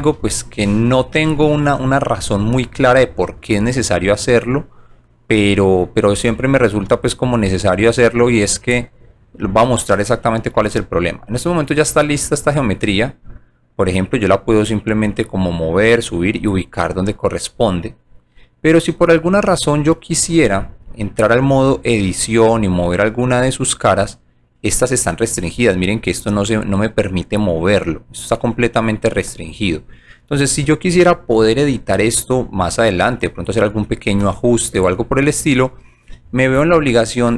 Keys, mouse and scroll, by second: 10.6 g, 11.3 right click, 12.5 w, 12.8 middle click, 14.6-16.3 drag, 16.6 right click, 18.5-19.5 alt+drag, 20.8 click, 21.8 click, 23.2 click, 24.8 click, 26.2 click, 29.1 scroll down 1, 29.4 scroll up 1.